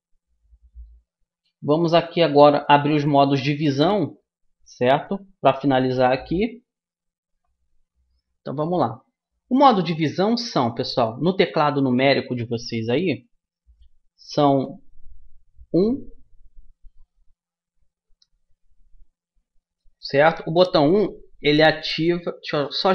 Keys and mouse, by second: 5.9-11.1 middle drag, 15.6 KP_1.